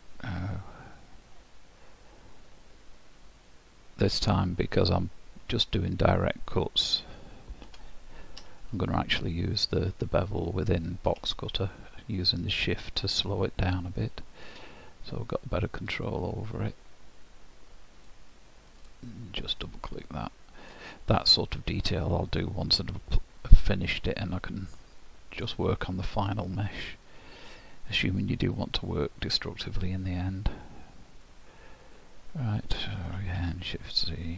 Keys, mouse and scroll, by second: 2.6 click, 8.4 scroll up 1, 19.6 middle click, 23.6-24.8 scroll down 2, 24.8 middle click, 26.1 middle click, 32.8 scroll down 1, 33.3 shift+z.